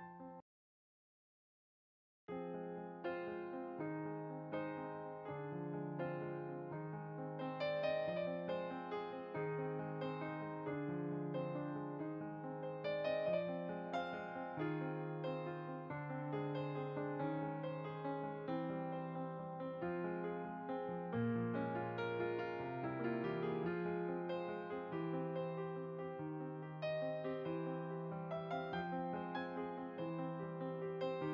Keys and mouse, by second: 0.0 click, 1.4 middle click, 1.8 click, 2.5 middle click, 5.5 click, 6.4-7.3 typing, 7.3 click, 24.8-25.1 typing, 25.5 click, 27.0 click, 29.8 click.